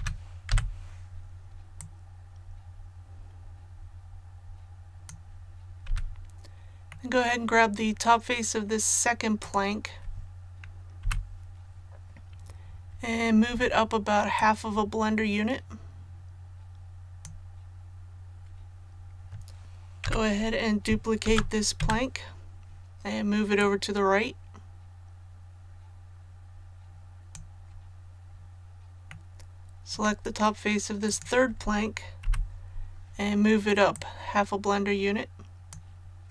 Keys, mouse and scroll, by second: 1.7-5.1 drag, 5.8 a, 6.9-8.1 middle drag, 9.4 right click, 11.0 KP_1, 14.3-18.1 drag, 19.6 ctrl+z, 21.2 shift+d, 23.5-27.3 drag, 29.0-30.3 middle drag, 31.0 right click, 32.2 KP_1, 33.9-36.3 drag.